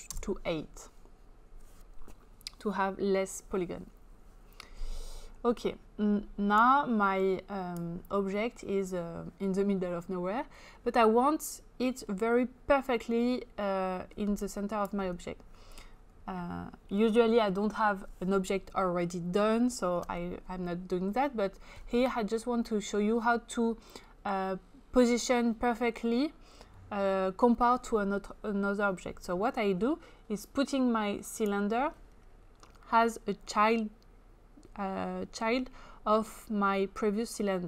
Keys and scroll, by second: 0.2 Return.